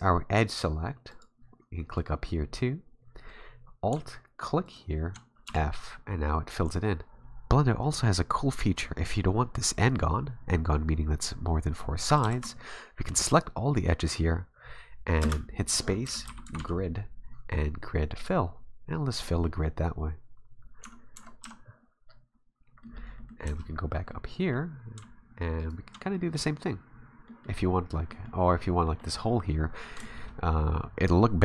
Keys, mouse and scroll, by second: 4.7 alt+right click, 5.4 f, 12.2 ctrl+z, 15.3 space, 20.6 scroll down 3, 20.8 Tab, 21.2 Tab, 21.4 a, 22.1-22.8 scroll down 5, 22.8 middle click, 23.2 middle click, 23.7-24.1 scroll up 4, 24.1 middle click, 25.6 alt+right click, 26.1 middle click, 26.6 scroll down 3, 28.1 middle click, 28.9 middle click, 29.6-30.0 scroll up 4, 30.0 shift+middle click.